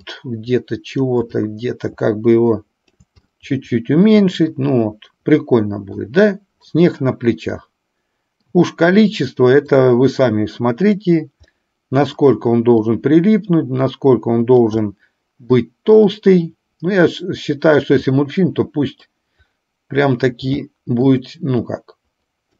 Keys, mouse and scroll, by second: 0.1-1.2 drag, 1.4-3.1 shift+drag, 3.4-6.1 middle drag, 7.7 middle click, 9.7-11.1 drag, 11.6 middle click, 12.8-14.7 drag, 14.9 middle click, 16.2-17.9 drag, 18.2-19.2 middle drag, 20.8 shift+middle click, 21.7-22.5 drag.